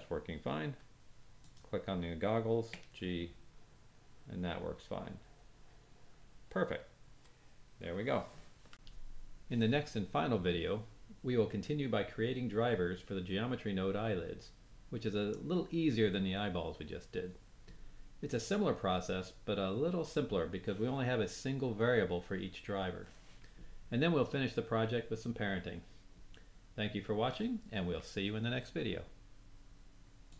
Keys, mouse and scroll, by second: 1.3 click, 2.7 g, 8.7 g.